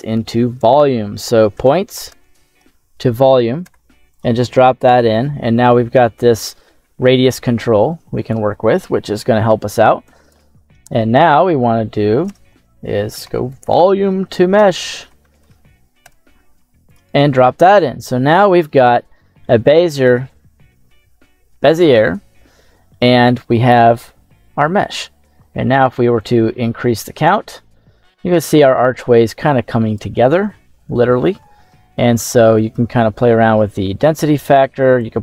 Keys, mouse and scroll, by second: 7.1-8.3 drag, 10.0 click, 12.2 space, 17.9-22.8 middle drag, 23.6 KP_7, 26.1-29.9 drag, 31.8 middle click, 32.6-34.1 drag, 34.9-35.2 drag.